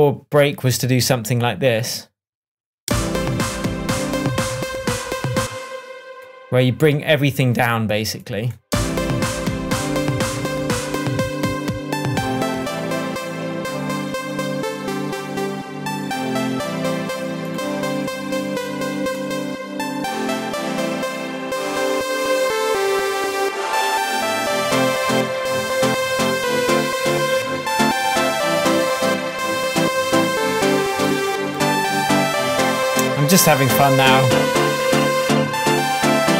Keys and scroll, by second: 2.8 space, 5.4 space, 8.7 space.